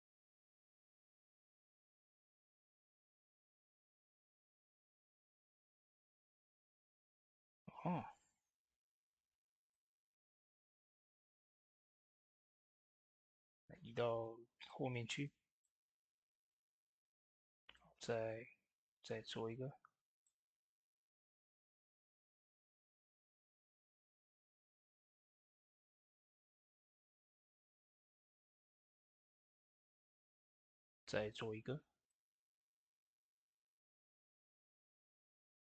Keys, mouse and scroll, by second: 8.4 shift+d, 9.6-17.0 drag, 17.0 shift+d, 17.6-20.5 drag, 20.5 ctrl+z, 21.4-26.2 drag, 26.8 s, 27.4 click, 27.8 ctrl+a, 28.0-30.5 drag, 30.5 shift+d, 31.9-35.7 drag.